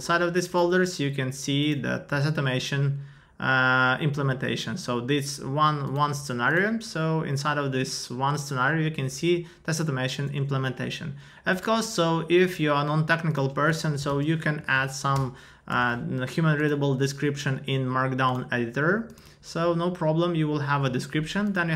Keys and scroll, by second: 14.6 Down, 15.1 Return.